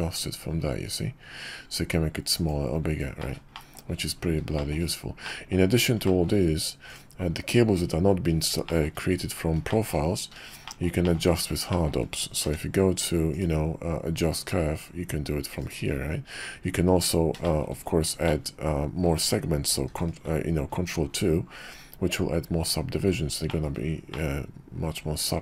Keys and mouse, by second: 3.2 click, 3.5 shift+click, 4.5 shift+middle click, 5.2 middle drag, 6.0 shift+middle drag, 6.9 click, 8.6 shift+middle drag, 9.7 shift+middle drag, 10.6 shift+click, 11.0 shift+click, 11.7 shift+drag, 12.4 q, 17.4 shift+drag, 18.2-19.0 shift+drag, 19.9 ctrl+2, 23.4 shift+middle click, 24.1-25.4 middle drag.